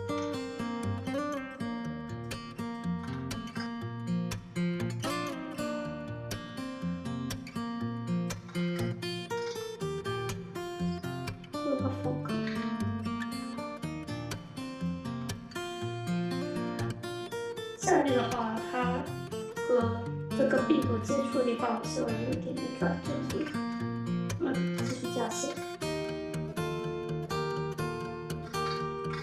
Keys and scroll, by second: 0.0 r, 2.8 w, 4.4 r, 6.3 w, 7.1 r, 8.3 w, 9.3 r, 12.3 1, 13.2 w, 14.9 r, 18.0 2, 24.6 ctrl+shift+e, 25.3 w, 28.4 1, 29.1 ctrl+shift+e.